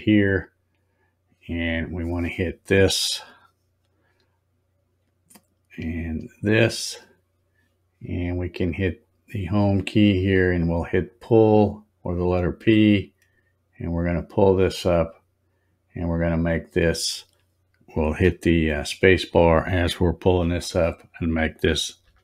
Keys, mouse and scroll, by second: 2.2 click, 6.1 ctrl+click, 8.8 click, 10.9 click, 14.0-20.4 drag, 20.4 space.